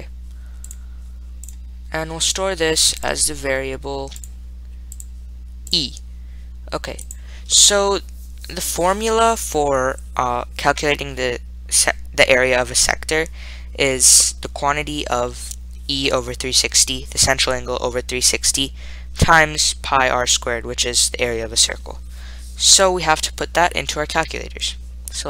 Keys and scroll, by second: 0.9 ., 4.5 ,, 5.9-6.6 typing, 7.3 Return.